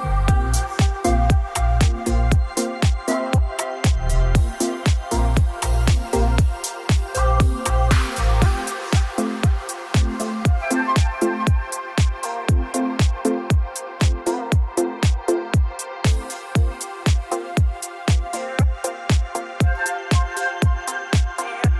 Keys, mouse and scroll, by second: 0.6 click, 0.7 click, 2.4 click, 3.1-4.3 typing, 5.0 click, 7.5 click, 8.2 o, 8.9 click, 9.3-10.4 scroll down 5, 11.6 click, 11.8-12.3 scroll down 4, 12.7 click, 13.3 m, 14.1 click, 14.6 scroll up 5, 16.0 click, 16.2-16.7 scroll down 3, 16.7-17.8 scroll up 16, 19.3 q, 19.8 Right, 21.6 click.